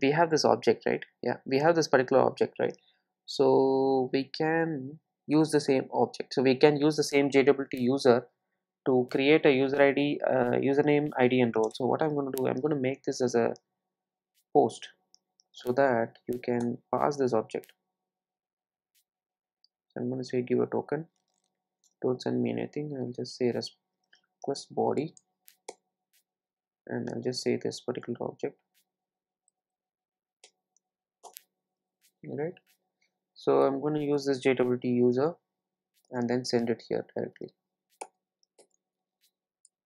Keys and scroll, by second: 7.9 super+c, 11.5 super+c, 16.8 Return, 25.7 Return, 27.9 Return, 31.3 Return, 34.9 alt+Return, 38.0 super+v.